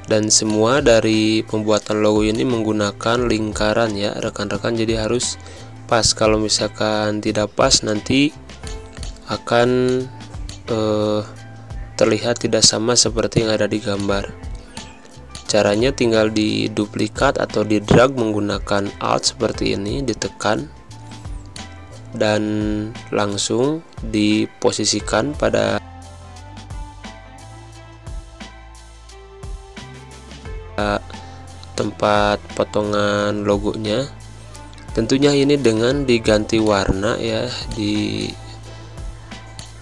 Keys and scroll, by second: 4.6 Down, 5.1 Left, 5.9 Down, 6.5 Right, 6.9 Left, 8.5 space, 15.0 space, 23.7 Down, 30.7 Down, 33.7 Down, 37.6 space, 38.6 v, 39.0 space.